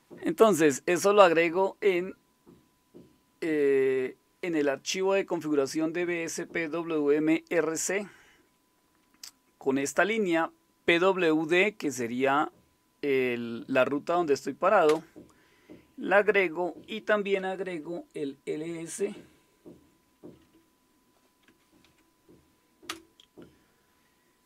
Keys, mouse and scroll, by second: 14.9 Return, 17.4 Up, 17.8 Left, 18.5-19.9 Left, 20.1 Delete, 20.3 Delete, 20.5 Delete, 21.2-22.4 typing, 22.9 Return.